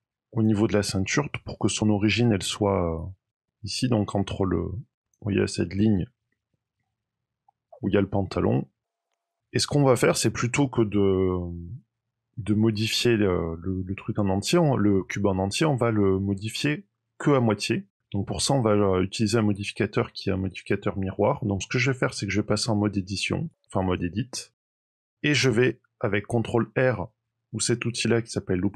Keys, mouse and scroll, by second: 0.6-1.8 scroll up 4, 2.9 click, 5.6-6.2 scroll up 7, 6.2 shift+middle click, 8.8 click, 9.0 scroll down 13, 9.1 scroll up 3, 9.2-10.8 scroll down 1, 21.4 middle click, 23.4 click.